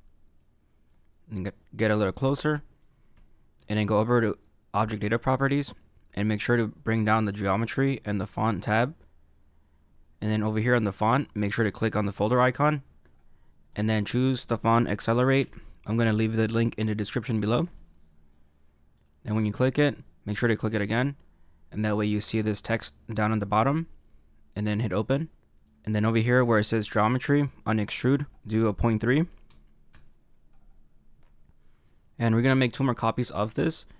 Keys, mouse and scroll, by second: 0.3 middle click, 1.1-2.3 scroll up 2, 2.3 shift+middle click, 5.0 click, 7.3 click, 7.8-8.6 scroll down 2, 8.6 click, 10.6-12.5 scroll down 1, 12.5 click, 25.6 middle click, 28.0 click.